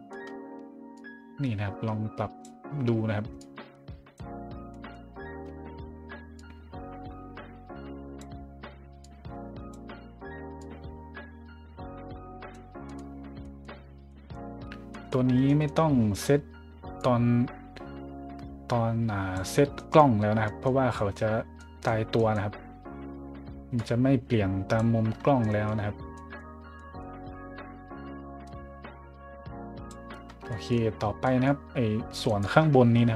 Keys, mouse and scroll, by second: 0.9-2.4 drag, 3.4 click, 4.5-6.3 scroll up 3, 6.3-8.2 drag, 9.0 click, 10.6-12.5 drag, 12.8 scroll up 1, 13.4 scroll up 1, 14.1 middle drag, 14.9 middle drag, 15.5 middle drag, 17.0-19.3 drag, 19.7 middle click, 20.4 middle drag, 20.9 middle click, 21.6 middle drag, 22.1 middle drag, 22.5 middle click, 23.8 click, 25.1 middle click, 25.4 middle drag, 26.1 middle drag, 26.7 middle drag, 27.3-28.3 scroll up 1, 28.4 click, 30.2 scroll up 1, 30.5 middle drag, 31.2 middle drag, 31.7-32.2 middle drag, 32.2 right click.